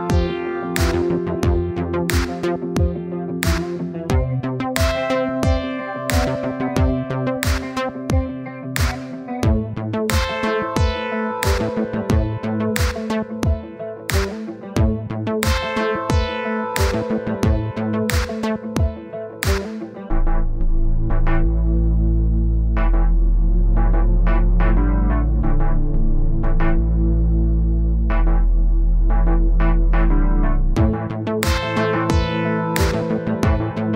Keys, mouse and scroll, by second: 2.7 middle click, 3.1 scroll down 1, 3.3 click, 3.9 middle click, 4.3-4.7 scroll up 1, 4.7 middle click, 5.2-8.2 drag, 8.6 click, 10.7-11.9 middle drag, 12.5-13.7 middle drag, 13.7 click, 14.5-15.7 drag, 16.0-17.3 middle drag, 17.3-17.9 scroll down 12, 17.9 click, 18.5 KP_0, 19.7-22.7 middle drag, 23.0 middle click, 23.9-24.8 scroll up 10, 24.8 click, 25.1-25.6 scroll down 12, 25.6 click, 26.2 KP_0, 26.7-28.0 middle drag, 28.1-29.3 middle drag, 29.6 middle click, 30.5 KP_1, 32.1-33.3 drag, 33.7 click.